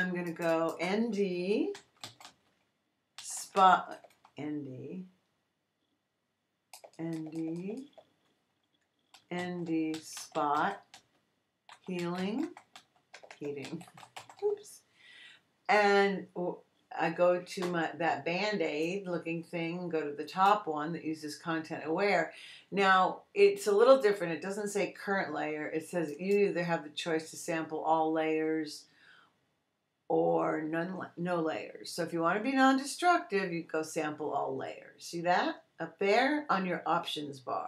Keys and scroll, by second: 1.7-4.0 typing, 6.7 BackSpace, 8.9-14.6 typing.